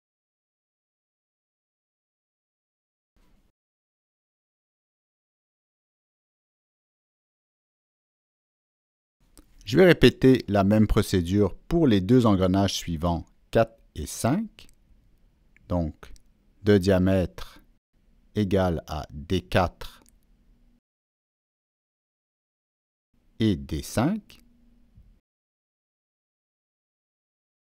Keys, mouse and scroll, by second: 0.0 Down, 0.4 Return, 2.0 click, 3.6 Escape, 4.1 Escape, 4.1 click, 4.8 drag, 5.3 Escape, 5.3 click, 5.4 Escape, 6.3 click, 7.4 click, 8.1 click, 8.8 right click, 9.7 click, 10.7 click, 11.6 click, 12.3 click, 12.9 right click, 13.8 click, 14.5 click, 16.6 click, 16.6 right click, 17.1 Down, 17.1 Return, 17.1 right click, 17.1 click, 17.3 Down, 17.3 Return, 17.3 click, 19.0 click, 20.9 click, 21.7 click, 24.4 Down, 24.4 click, 24.6 Return, 25.5 Return, 25.5 Down, 26.3 click, 26.5 Return, 26.5 Down.